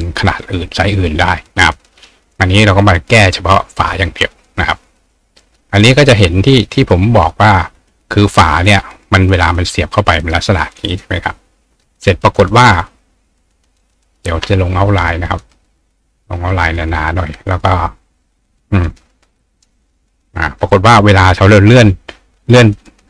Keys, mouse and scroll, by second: 0.3 right click, 2.8 click, 5.0 click, 5.5 click, 6.9-9.6 drag, 10.9 click, 13.8 right click, 15.5 click, 18.2 click, 19.8 click, 21.6-23.0 ctrl+drag.